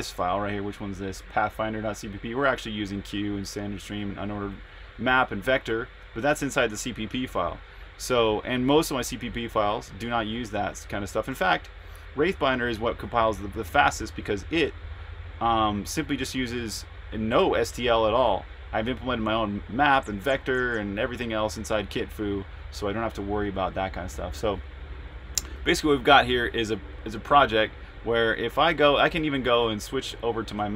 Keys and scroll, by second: 28.3 super+Tab.